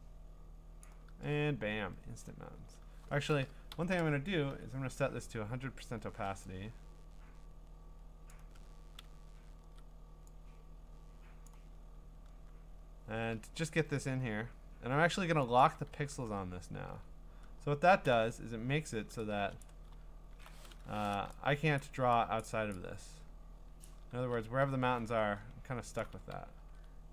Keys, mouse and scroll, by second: 0.8 click, 2.2 click, 2.5 ctrl+z, 3.7-4.5 typing, 6.2 0, 8.3 click, 9.6 ctrl+z, 11.4 click, 15.6 click, 16.1 b, 17.0-18.0 ctrl+scroll, 18.1 b, 19.6 click, 19.9-21.0 scroll, 21.8 click, 22.0 x, 22.4 click, 22.7 click, 23.8 click, 24.2 ctrl+z, 24.9-26.2 scroll, 26.2 ctrl+z, 26.6 ctrl+z.